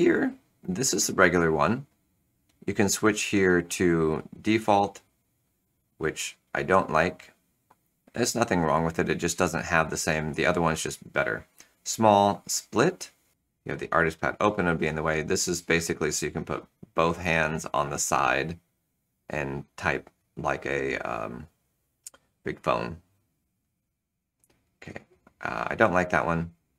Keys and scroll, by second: 7.3 Return, 12.3 Return, 23.7 Return, 25.1 Return.